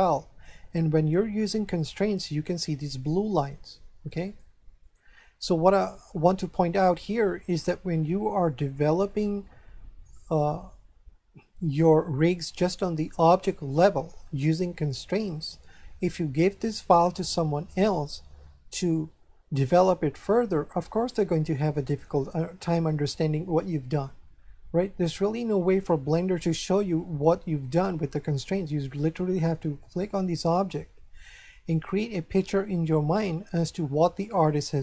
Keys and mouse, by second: 4.2 click, 6.7 shift+middle click, 29.9 right click.